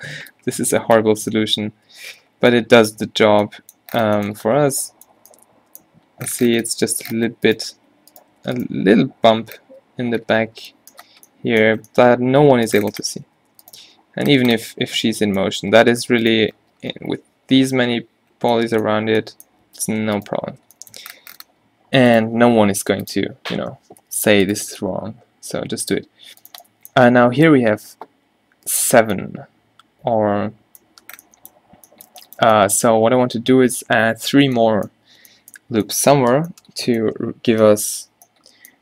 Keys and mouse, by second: 0.2 a, 0.2 b, 1.3 q, 1.6 q, 2.0 q, 2.1 middle click, 2.4 middle click, 3.3 Tab, 4.8 Tab, 5.3 a, 7.8 g, 8.5 g, 9.8 Tab, 13.0 a, 13.4 a, 14.0 Tab, 14.8 a, 20.0 Tab, 21.3 Tab, 22.4 g, 24.1 a, 25.0 s, 26.1 g.